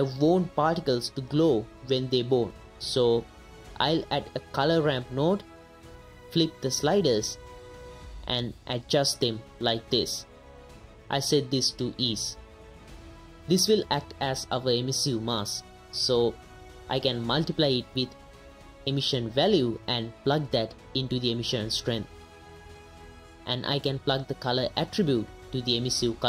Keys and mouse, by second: 0.3 ctrl+z, 0.3 ctrl+x, 0.6 middle click, 1.0 middle click, 2.0 click, 2.2 right click, 2.9 right click, 5.3 right click, 5.7 middle click, 6.4-7.3 right drag, 8.2-9.7 right drag, 10.7 right click, 11.4-12.2 right drag, 13.9 middle click, 14.2 middle click, 14.5 right click, 14.9 right drag, 15.2 right click, 15.7 middle click, 16.0 right click, 16.3 middle click, 16.6 right click, 17.0 middle click, 17.4-17.7 right drag, 18.7 right click, 19.1 right drag, 19.6 right click, 20.0 ctrl+shift+click, 20.4 right click, 21.2 right click, 21.8-22.4 right drag, 22.5 middle click, 23.1 right click, 23.8 right click, 24.2 middle click, 25.2-26.0 right drag, 26.1 middle click.